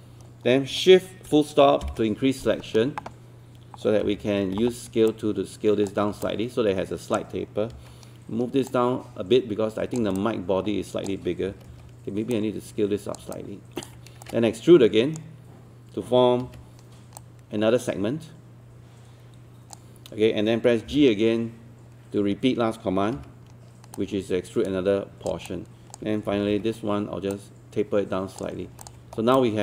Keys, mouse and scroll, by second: 4.0 typing, 5.1 click, 6.0 scroll down 1, 6.3 alt+click, 7.7 alt+w, 8.7 click, 10.2 alt+click, 11.5 alt+e, 12.3 click, 13.3 alt+click, 14.3-15.4 shift+right drag, 16.4 w, 17.2-20.4 drag, 20.9 g, 23.2 w, 24.0 click, 25.5 alt+click, 26.3 alt+e, 27.3-28.4 drag, 28.9 alt+click, 29.4 alt+click.